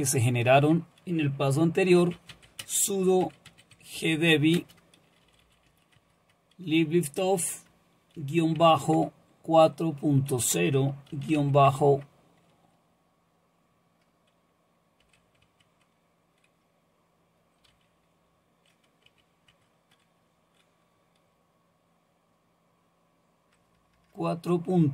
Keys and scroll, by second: 1.8-6.2 typing, 8.2 typing, 11.1-11.4 typing, 11.7 Tab, 15.0 typing, 15.4 Tab, 17.7 d, 19.1 Tab, 19.5 Tab, 23.5 BackSpace, 23.8 BackSpace, 23.9 BackSpace.